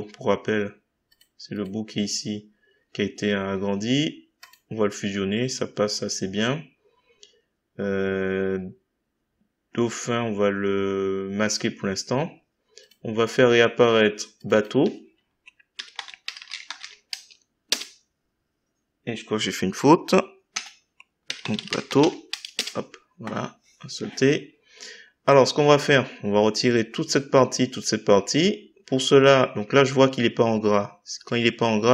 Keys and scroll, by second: 15.7-17.3 typing, 17.6 Return, 20.5 F2, 22.6 Return.